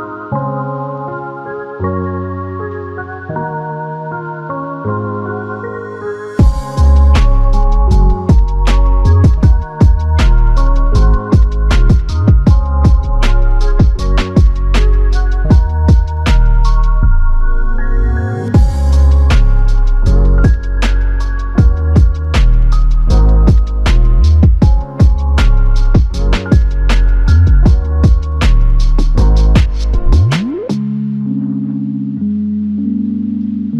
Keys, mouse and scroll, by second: 1.4 alt+click, 13.6 ctrl+click, 15.5 q, 17.4 typing, 32.8 alt+click.